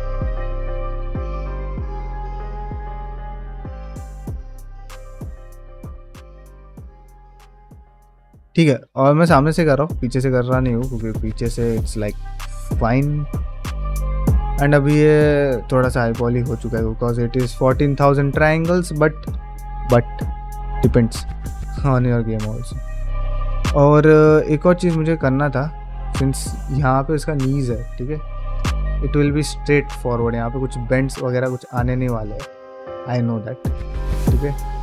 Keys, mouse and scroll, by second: 0.6 click, 1.0 g, 1.8-3.6 shift+right drag, 4.5 shift+Tab, 5.1 g, 6.4-7.7 middle drag, 8.0 ctrl+middle click, 8.2 middle click, 8.8 ctrl+middle click, 9.0 middle click, 9.4 shift+middle click, 9.8 middle click, 10.7 middle click, 11.5 ctrl+middle click, 11.8 shift+middle click, 12.1-14.0 middle drag, 14.2 ctrl+middle click, 14.5 middle click, 14.9 ctrl+Tab, 15.5 click, 15.9 middle click, 16.3 shift+middle click, 16.6 ctrl+middle drag, 17.0 shift+middle click, 17.3-17.7 middle drag, 17.9 shift+middle drag, 18.2-18.8 middle drag, 20.6-21.5 middle drag, 22.2 shift+middle click, 22.6 ctrl+middle click, 22.9 shift+middle drag, 23.1 ctrl+middle drag, 23.5 middle drag, 23.8-24.1 shift+middle drag, 24.4 ctrl+middle click, 24.6-25.1 middle drag, 25.2 ctrl+middle click, 25.7-26.1 middle drag, 28.1 drag, 28.6 shift+middle click, 28.9 ctrl+middle click, 29.5 shift+middle click.